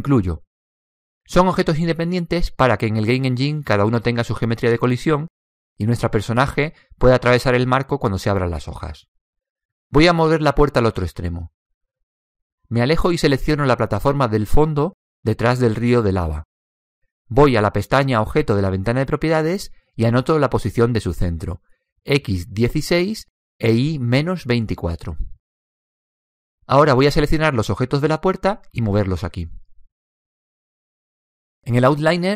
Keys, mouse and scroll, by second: 2.3-4.3 middle drag, 14.5 right click, 18.3 click, 22.2 click, 25.5 click.